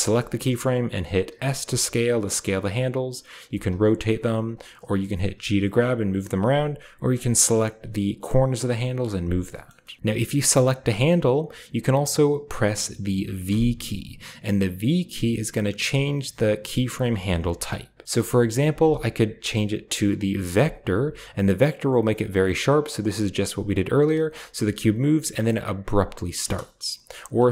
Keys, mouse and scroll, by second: 1.4 s, 3.3 r, 4.3 click, 5.2 g, 8.4 click, 9.4-12.1 ctrl+right drag, 9.5-10.0 scroll down 1, 13.2 v, 18.0-20.4 middle drag, 18.6 v, 20.4-23.5 drag, 22.7 space, 24.1-26.0 drag, 26.2 space, 27.0 a.